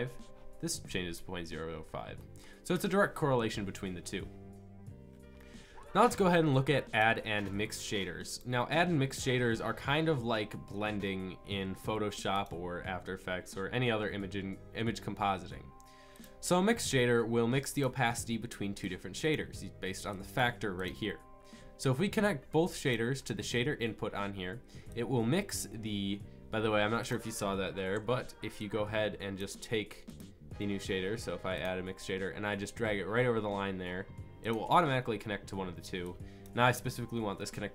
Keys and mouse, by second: 19.0-22.1 drag, 22.9-24.2 drag, 27.9 Delete, 28.9 click, 36.4-37.7 drag.